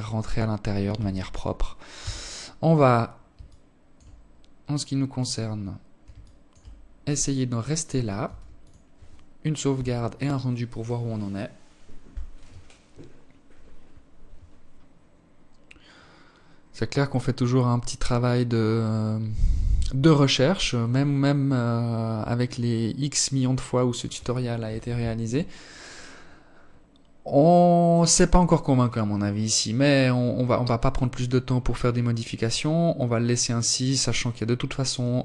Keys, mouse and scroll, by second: 0.3 KP_0, 1.7 alt+shift+click, 2.5-3.3 scroll down 2, 3.9-4.5 scroll down 1, 4.5 alt+shift+click, 5.6 click, 6.5 ctrl+s, 33.5 Escape, 34.3 right click, 35.0 KP_3.